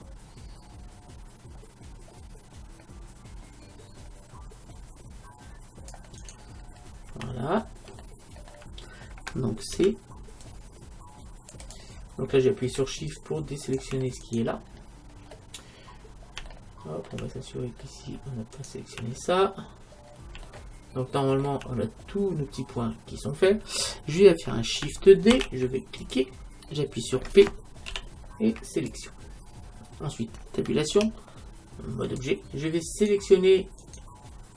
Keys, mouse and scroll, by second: 6.7-9.9 middle drag, 9.8 c, 14.7 middle click, 15.6-16.5 scroll up 1, 16.5 middle click, 17.6 middle click, 18.6-20.5 right drag, 19.2 middle click, 20.5-22.6 middle drag, 23.2-25.4 middle drag, 25.4 shift+d, 26.1-28.1 drag, 27.9 p, 31.0 Tab, 32.9-34.5 right drag.